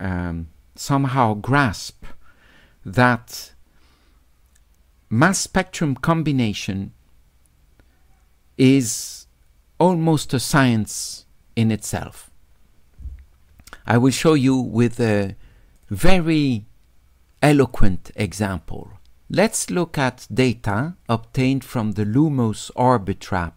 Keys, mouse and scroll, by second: 15.8 click, 17.6 click, 19.7 click.